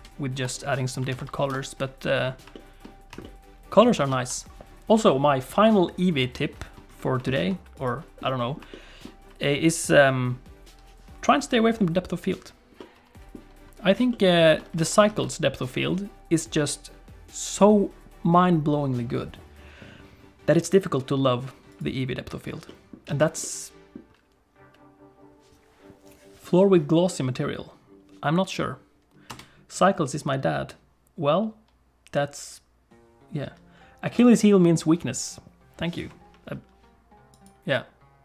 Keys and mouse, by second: 1.1 ctrl+s, 1.5 KP_0, 2.6 shift+click, 3.3 shift+click, 4.1 ctrl+s, 7.3 shift+middle click, 7.8 click, 8.3 middle click, 8.7 shift+middle click, 12.8 middle click, 14.1 shift+middle click, 14.8 alt+a, 15.1 ctrl+s, 21.7 click, 22.7 alt+middle click, 23.1 alt+a, 23.4 middle click, 24.1 ctrl+s, 24.1 space, 30.1 space.